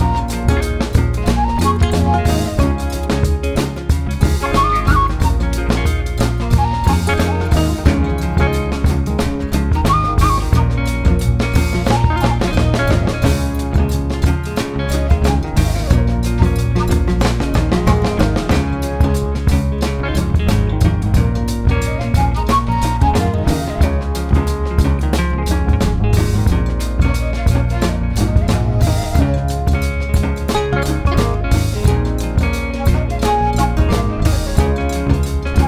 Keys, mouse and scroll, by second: 1.0 click, 1.2 click, 1.5-3.2 middle drag, 3.2-4.2 drag, 4.2-6.0 middle drag, 6.0 scroll down 1, 6.1-7.4 middle drag, 7.4 click, 7.8 middle click, 8.1 scroll up 1, 8.3 middle click, 8.8 click, 9.0 middle click, 9.2 scroll up 2, 9.4 shift+middle click, 10.0-14.6 drag, 14.6 shift+middle click, 15.4-20.6 drag, 20.6 middle click, 21.0-25.6 drag, 25.6 middle click, 26.5 click, 26.8 middle click, 27.1 click, 27.4 middle click, 27.7-28.7 drag, 28.7 shift+middle click, 29.4 click, 29.6-31.5 middle drag, 31.5 click, 32.4-33.7 shift+middle drag, 33.7 click, 34.0 middle click, 34.6 click, 34.8 shift+middle click, 35.1 scroll up 2, 35.2 middle click.